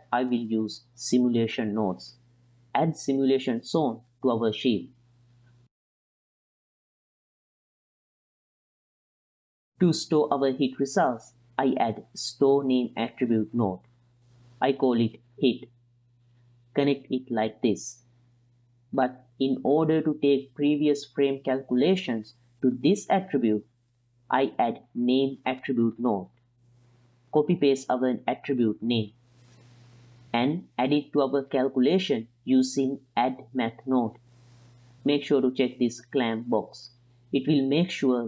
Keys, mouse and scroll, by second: 0.2-1.3 middle drag, 3.0 shift+a, 5.4 drag, 5.9 drag, 6.2 click, 6.5 click, 6.8 drag, 7.6 click, 7.6 x, 8.0 middle click, 8.3 click, 8.8-9.6 drag, 9.8 middle click, 10.8 shift+a, 14.7-16.2 drag, 17.0 middle click, 17.8-18.5 drag, 23.3 shift+a, 28.7 ctrl+c, 29.7 ctrl+v, 31.1 click, 31.2-32.9 drag, 32.1 d, 33.2-33.8 drag, 34.3-34.9 drag, 35.4-36.5 drag, 37.3 click.